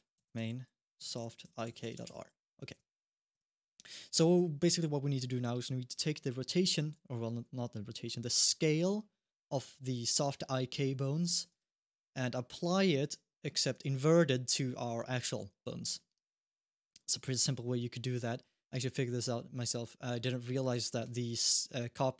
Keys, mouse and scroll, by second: 3.1 Tab, 4.0 Tab, 6.9 middle click, 8.4-9.0 scroll up 1, 11.2 click, 12.5 click, 13.5 click, 17.9 click.